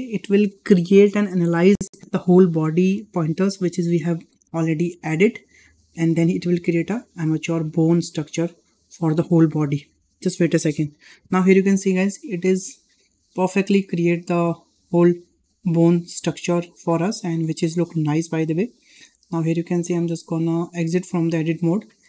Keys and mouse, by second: 12.8 shift+middle click, 13.2-13.5 middle drag, 14.2-15.0 middle drag, 15.6-16.3 middle drag, 16.7 shift+middle drag, 17.3 shift+middle drag, 18.6 shift+middle drag, 19.0 middle drag, 21.1 Tab, 21.9 middle click.